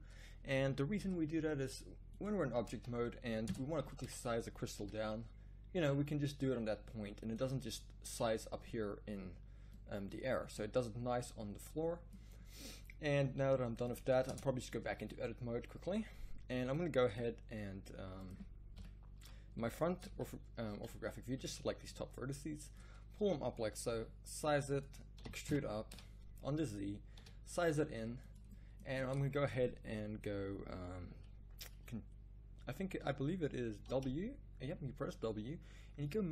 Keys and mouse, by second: 0.5 g, 3.4 Tab, 4.0 z, 4.8 s, 14.2 Tab, 18.7 KP_1, 19.2 z, 20.1 a, 20.8 b, 22.0 click, 23.9 s, 25.1 e, 27.2 s, 33.8 w.